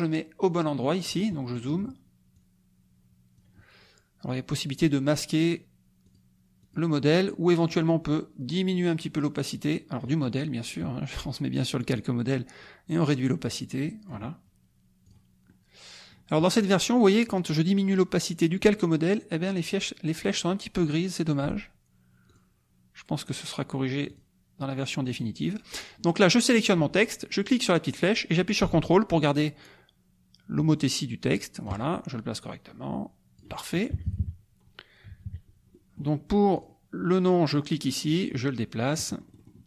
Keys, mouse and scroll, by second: 1.4 middle click, 2.3-3.5 drag, 4.8-7.1 drag, 8.7-10.2 drag, 10.7 click, 12.6-14.2 drag, 15.0 click, 15.4 middle click, 22.2 click, 24.1 click, 27.5-32.0 drag, 32.5-33.9 drag, 33.9 KP_Subtract, 35.8 middle click, 36.5 click, 37.3 click, 38.1-39.6 drag.